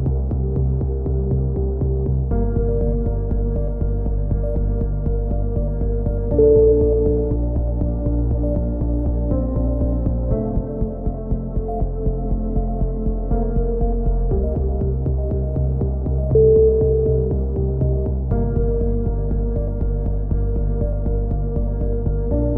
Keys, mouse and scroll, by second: 1.3 ctrl+z, 1.3-3.6 right drag, 3.4 shift+q, 3.9 z, 4.2-5.2 right drag, 5.0 f, 5.2 a, 5.9 Tab, 10.4 middle click, 11.1-13.1 drag, 11.5 Tab, 13.6-15.9 drag, 14.8 right click, 19.6 a, 20.0-21.1 drag, 21.9 alt+m.